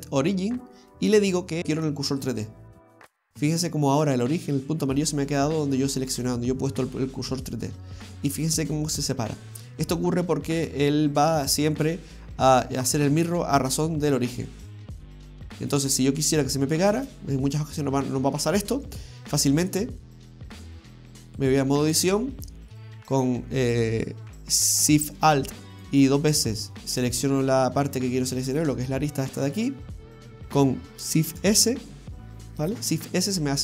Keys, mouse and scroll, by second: 6.1-7.7 scroll down 2, 10.4 middle click, 15.4-17.6 scroll up 4, 17.6 scroll down 1, 17.7 scroll down 1, 17.9 middle click, 19.1-20.2 scroll up 3, 20.2 click.